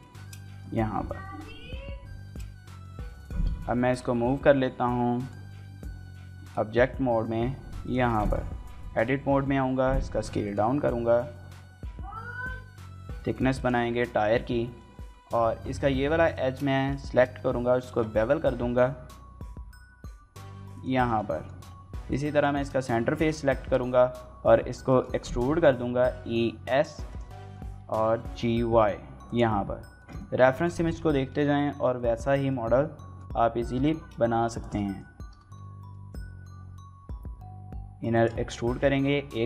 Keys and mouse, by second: 0.0 shift+middle click, 0.3 middle click, 0.7 KP_1, 1.0 KP_3, 2.0 shift+middle click, 3.1 g, 5.0 right click, 5.2 Tab, 5.7 g, 5.9 y, 7.6 click, 7.7 Tab, 8.0 a, 9.2 s, 9.4 x, 10.2 right click, 10.5 s, 10.9 y, 13.4 click, 13.9 shift+click, 14.1 click, 14.7 shift+click, 16.0 alt+click, 16.2 shift+middle click, 16.5 middle click, 16.9 shift+middle click, 17.1-18.1 ctrl+middle drag, 18.1 ctrl+b, 18.1 ctrl+click, 20.5 click, 20.9 shift+click, 22.4 shift+click, 24.7 shift+click, 25.9 s, 26.9 click, 27.1 middle click, 27.6 g, 27.8 y, 29.0 click, 29.8 shift+middle click, 30.0 middle click, 30.5 shift+middle click, 30.9 middle click, 31.5 shift+middle click, 31.8 middle click, 32.3 middle click, 33.6 y, 34.4 shift+click, 34.6 middle click, 35.0 e, 35.2 s, 38.0 shift+click, 38.5 shift+middle click, 38.7 middle click.